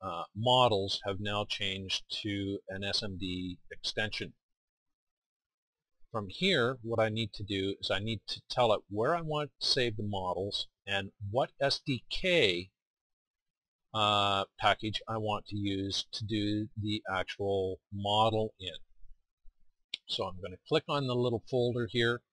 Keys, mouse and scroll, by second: 22.2 click.